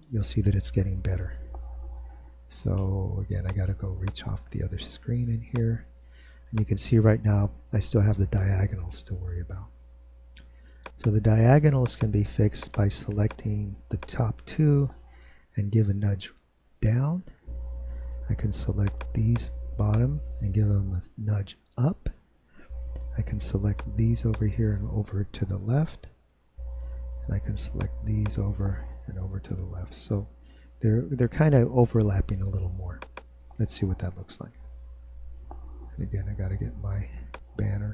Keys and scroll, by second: 16.7 Down, 21.8 Up, 26.2 Left, 30.7 Right, 34.2 super+Return.